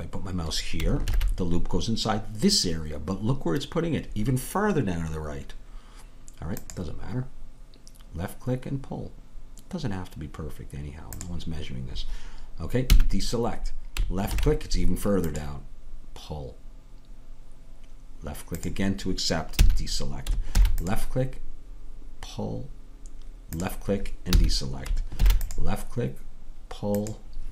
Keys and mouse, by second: 1.1 ctrl+r, 12.9 a, 14.3 ctrl+r, 19.6 a, 20.6 ctrl+r, 24.3 a, 25.2 ctrl+r.